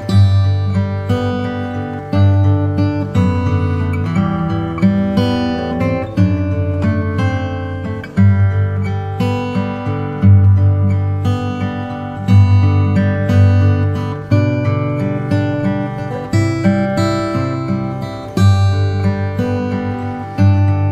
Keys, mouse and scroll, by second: 0.6 click, 0.8 n, 3.6-5.1 drag, 3.6 b, 5.1 Return, 14.3-15.3 drag, 14.7 s, 20.4 shift+a.